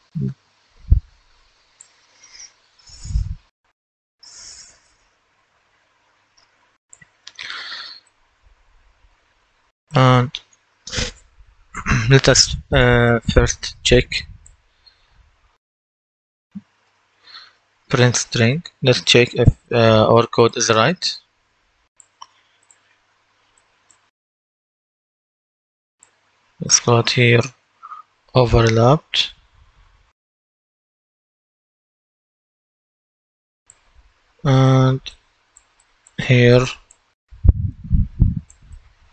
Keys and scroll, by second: 3.7 F10, 16.7-20.0 typing, 28.3-32.2 typing, 32.6 Return, 34.3 ctrl+d.